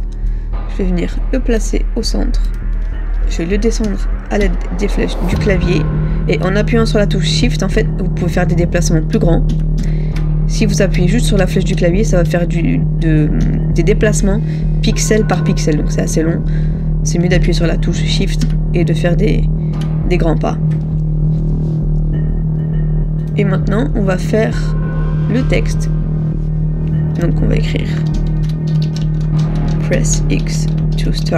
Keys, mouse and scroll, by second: 3.9 shift+Down, 4.5 shift+Down, 6.5 shift+Down, 9.6 shift+Down, 11.5 Down, 17.5 Down, 18.5 shift+Down, 28.9-31.3 typing.